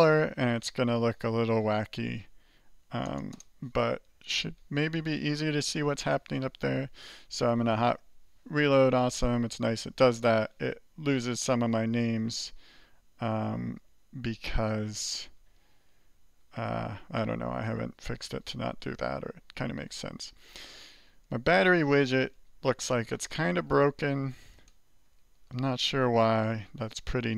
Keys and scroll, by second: 0.0-0.1 typing, 7.6 alt+r, 8.2 alt+r, 15.3 alt+2, 16.4 alt+3, 19.6-27.3 typing, 22.1 Escape.